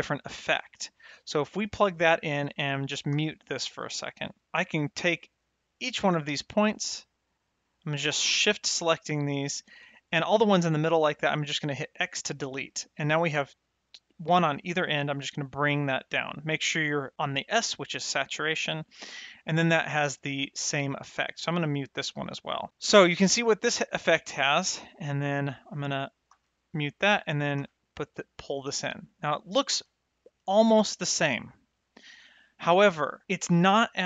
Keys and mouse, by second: 0.9 click, 2.0 click, 3.2 m, 3.5 middle click, 4.7 click, 5.7 shift+click, 6.1 shift+click, 6.8 shift+click, 7.6 shift+click, 8.5 shift+click, 9.1 shift+click, 11.8 click, 12.7 middle click, 13.8 click, 15.5 click, 17.5 click, 20.8 middle click, 21.6 click, 22.1 m, 22.8 click, 25.8 click, 26.2 m, 27.1 click, 27.5 m, 29.2 click, 29.6 m, 30.2 click, 30.5 m.